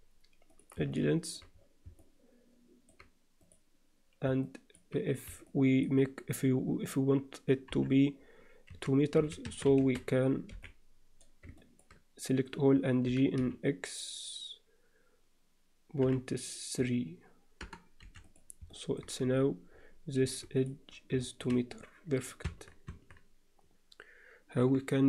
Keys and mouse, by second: 0.9 middle click, 2.0 alt+middle click, 3.4 click, 4.4 alt+middle click, 5.4 alt+middle click, 7.7-10.5 typing, 11.6 ctrl+middle click, 13.0 g, 18.7 middle click, 19.2 z, 20.2 2, 21.2 alt+shift+middle click, 22.9 Tab, 24.6 KP_7.